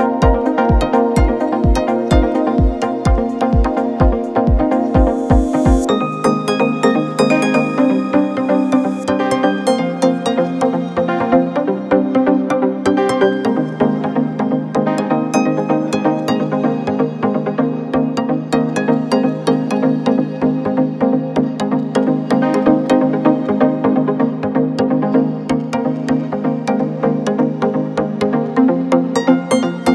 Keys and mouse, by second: 0.8 r, 3.8 middle click, 4.7-9.4 drag, 5.8 r, 6.3 r, 6.8 g, 9.4 middle click, 10.2-21.0 drag, 18.5-19.6 middle drag, 19.8-21.6 middle drag, 21.6-23.3 drag, 23.3-26.0 shift+middle drag, 25.3 shift+d, 26.0-29.9 drag.